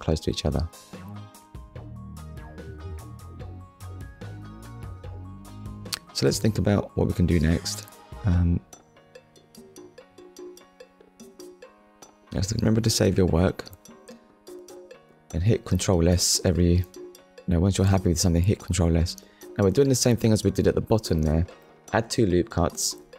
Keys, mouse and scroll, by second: 0.5-0.8 scroll up 1, 1.2-1.5 scroll up 1, 2.1 scroll down 1, 3.8 middle click, 4.8 z, 5.5 click, 6.1 middle click, 7.2 ctrl+s, 10.5 click, 11.7 middle click, 12.4 click, 13.1 Tab, 14.0 middle click, 16.8 ctrl+r, 18.1-18.5 scroll up 1, 20.0 click, 20.5 right click, 22.0 KP_1.